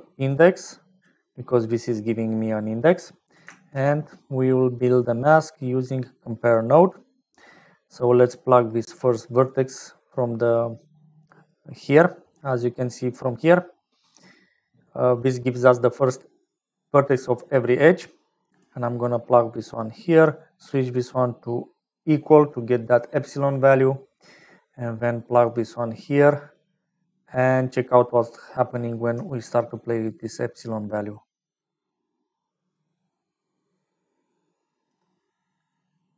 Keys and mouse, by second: 2.2 click, 3.2 click, 3.4 shift+a, 8.3-9.6 drag, 10.5 click, 15.5-17.7 drag, 18.1 click, 19.7 click, 20.7-22.0 drag, 22.6 middle click, 24.4 middle click, 25.5 click, 27.0-28.6 middle drag, 29.7-34.8 shift+drag, 35.3-36.1 middle drag.